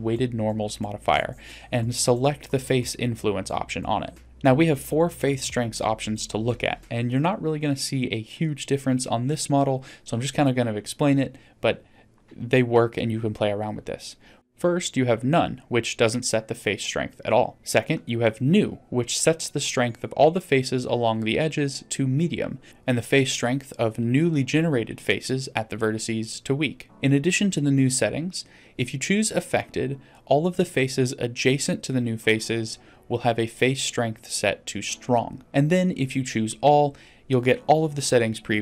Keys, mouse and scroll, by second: 0.1 scroll down 3, 4.6 click, 8.3-12.1 drag, 13.5-14.9 drag, 15.5-17.5 drag, 18.4 click, 19.0 click, 20.2-21.6 scroll down 2, 21.6-22.6 drag, 22.7-25.4 drag, 26.3-26.9 scroll down 1, 26.9 click, 27.6 click, 28.2 middle drag, 29.2-30.8 drag, 31.5-32.7 drag, 33.8-37.6 drag.